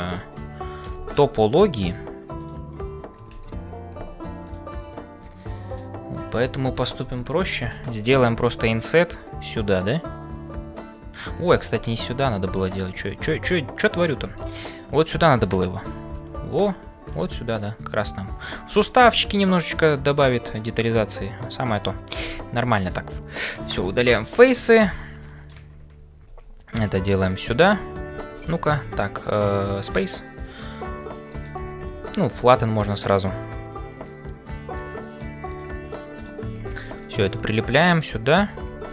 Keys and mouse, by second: 0.0-38.9 typing, 0.0 click, 3.3 ctrl+z, 5.2 middle click, 9.7-11.2 middle drag, 11.5-13.8 ctrl+z, 14.3 shift+click, 19.6-21.7 middle drag, 21.7 click, 25.3 middle click, 27.4 click, 28.4 alt+click, 30.5-33.2 middle drag, 33.6-35.2 middle drag, 35.5 click, 36.1 middle click, 37.4 middle click.